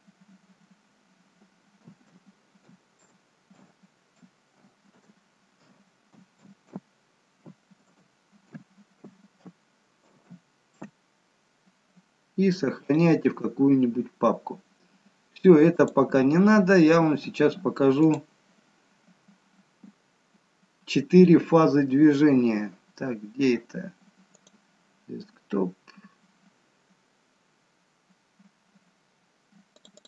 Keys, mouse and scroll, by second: 14.4-15.8 scroll down 2, 15.8 click.